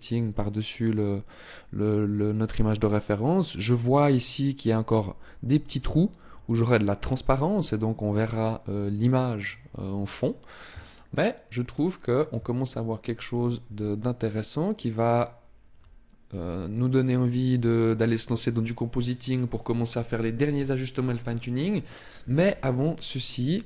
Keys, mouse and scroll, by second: 0.0-0.3 scroll up 1, 8.9 scroll down 1, 9.8-10.7 scroll down 1, 10.7 shift+middle click, 23.0 click.